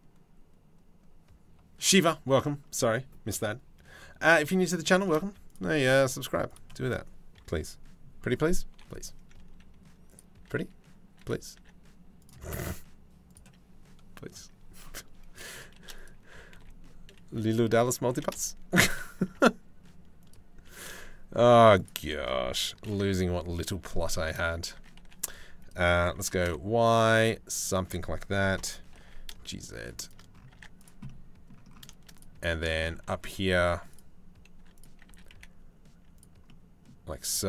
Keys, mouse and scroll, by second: 4.1 click, 4.7 click, 4.8 z, 5.3 click, 5.7 Tab, 6.1 click, 8.3 i, 10.0 r, 11.2 e, 12.1 s, 15.4 shift+d, 15.9 s, 17.7 g, 18.8 s, 20.3 e, 22.4 ctrl+l, 23.2 click, 23.7 middle click, 24.4 s, 25.7 s, 28.2 ctrl+l, 28.6 g, 30.2 Tab, 30.4 click, 30.7 middle click, 31.8 click, 32.0 Tab, 32.3 shift+middle click, 32.7-34.2 drag, 34.2 3, 34.7 s, 36.1 middle click, 36.3 middle click, 37.2 g.